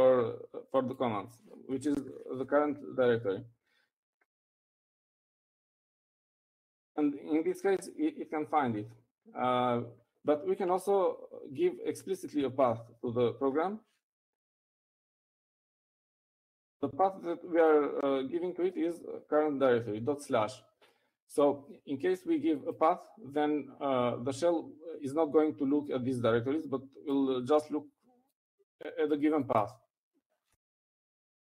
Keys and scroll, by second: 3.0-4.0 typing, 5.9-8.5 typing, 14.0 typing, 15.7-17.0 typing.